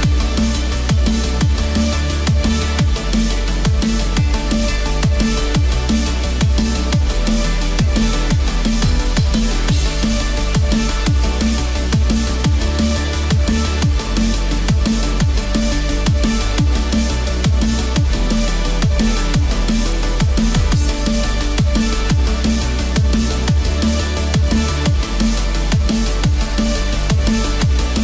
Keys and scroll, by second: 6.3 ctrl+z.